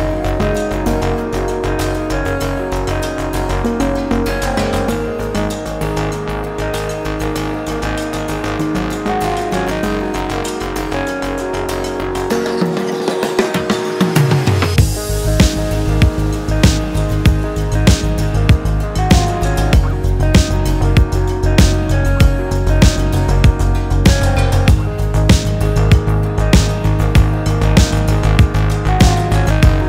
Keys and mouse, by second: 0.5 shift+middle click, 8.0-10.6 drag, 10.9 shift+click, 12.4-14.0 drag, 16.7 i, 17.9 s, 21.7 click, 22.7 alt+s, 26.0-27.5 drag, 27.6 shift+click, 28.0 shift+middle click, 28.2 middle click, 28.9 shift+middle click.